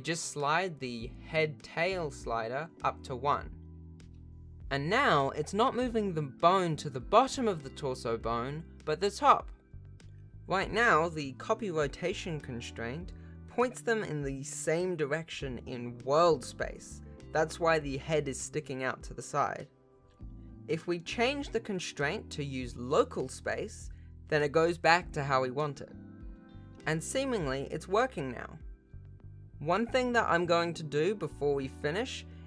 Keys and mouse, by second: 1.8-21.3 drag, 21.9-23.2 drag, 24.1 shift+middle click, 24.8 alt+a, 29.0 r, 31.0 g.